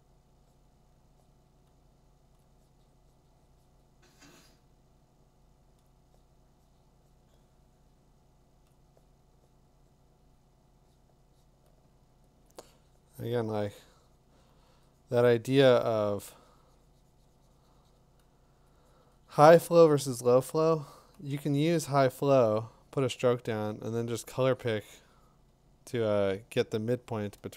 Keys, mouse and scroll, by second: 2.4 click, 5.0 click, 5.9 click, 6.3 click, 8.8 click, 12.4 click, 16.3 click, 18.7 click, 20.2 click, 20.4 click, 23.0 click, 27.3 click.